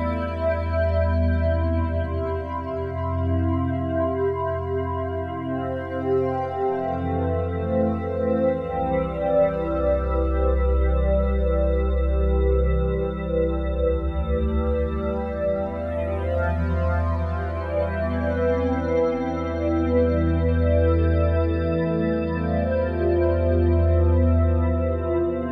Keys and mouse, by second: 6.0-8.1 drag, 8.1 0, 9.2 alt+shift+click, 11.7 click, 13.8 click, 14.3 alt+shift+click, 16.3 click, 18.0 click, 18.8 typing, 18.8 ctrl+alt+click, 21.7 typing, 22.5 click, 23.6 click, 25.0 click.